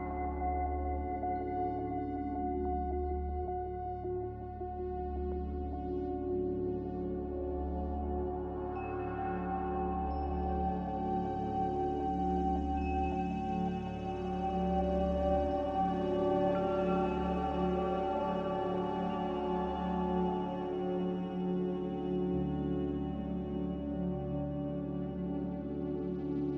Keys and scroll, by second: 2.1 m, 5.1 Escape, 13.7 Escape, 20.0 Escape, 20.4 n.